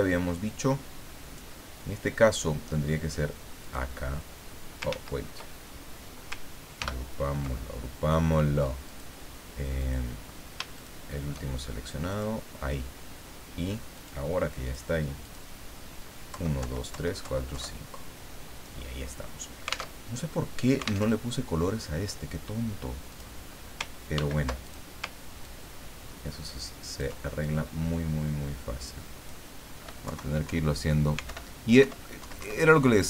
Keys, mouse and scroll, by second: 0.3-1.5 drag, 3.6 click, 4.9 ctrl+z, 6.8 ctrl+g, 8.8 click, 9.8 click, 10.7 shift+click, 12.1 click, 13.9 click, 14.6 click, 15.2 click, 16.3 Left, 20.0 alt+Tab, 21.1 alt+Tab, 23.1 click, 24.1 ctrl+d, 24.6 ctrl+click, 25.4-27.1 ctrl+drag, 27.4-29.4 ctrl+drag, 30.0 Left, 30.4 Down, 31.3 alt+Up, 32.2 alt+Down.